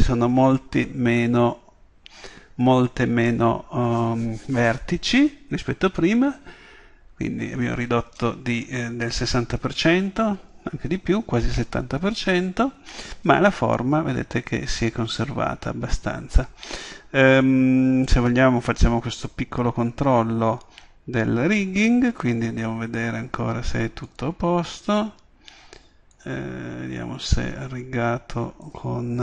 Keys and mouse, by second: 13.9 Tab, 15.6 Tab, 24.1-25.9 drag, 26.2-28.0 drag, 28.1-29.2 middle drag.